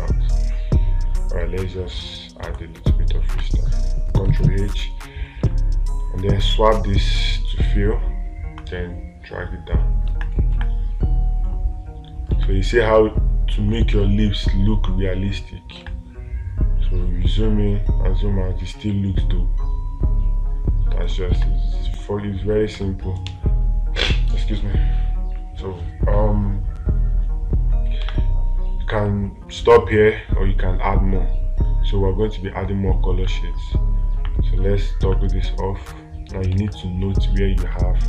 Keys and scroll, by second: 11.0 space, 12.8 space, 16.3 space, 21.8 space, 28.5 space, 37.0 space.